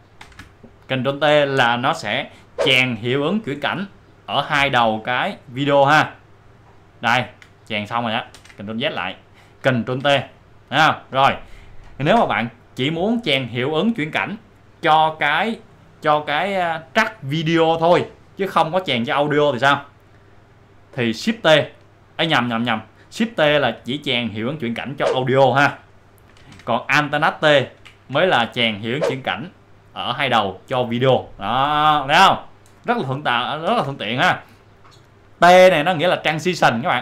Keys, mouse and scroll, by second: 5.6 ctrl+alt+t, 5.6 alt+scroll up 1, 8.3 alt+scroll up 1, 8.4 ctrl+z, 12.0 ctrl+t, 12.5 click, 21.1 click, 21.5 shift+t, 27.9 alt+t, 33.4 ctrl+alt+t, 33.7 ctrl+z, 35.3 click.